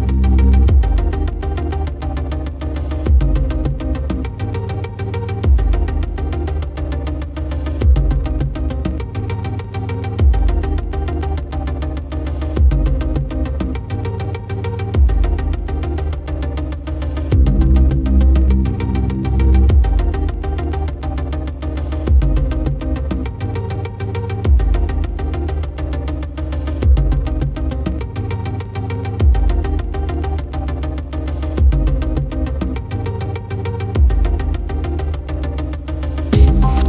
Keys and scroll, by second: 15.7 ctrl+-, 26.3 ctrl+0, 30.7 ctrl+=.